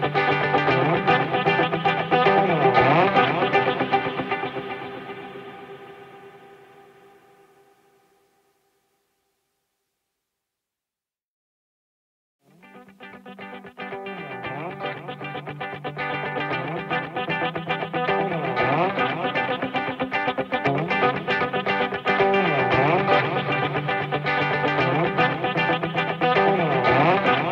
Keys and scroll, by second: 3.3 ctrl+-, 3.7 ctrl+=, 19.5 ctrl+-, 20.1 ctrl+=, 23.3 ctrl+-, 24.1 ctrl+-.